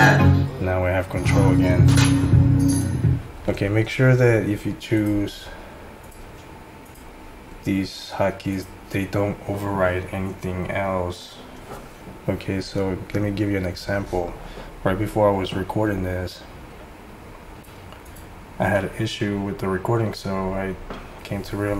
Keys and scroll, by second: 0.1 F7, 0.2 F7, 0.5 F7, 1.1 F8, 1.3 F8.